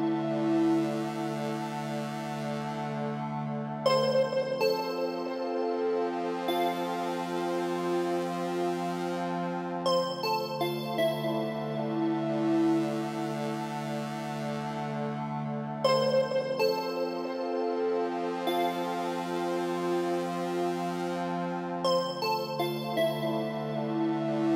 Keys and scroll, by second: 23.9 Right.